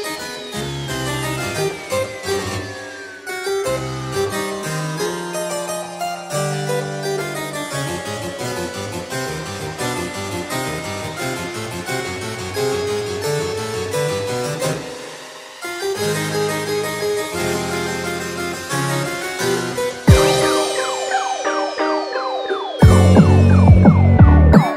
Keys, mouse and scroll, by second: 6.5 click, 7.4 g, 8.8 click, 8.8 g, 9.0 g, 11.4 shift+click, 12.3 ctrl+click, 13.3 right click, 21.6 scroll down 1, 22.0 shift+middle click, 22.9 scroll up 1, 23.1 2, 24.1 right click.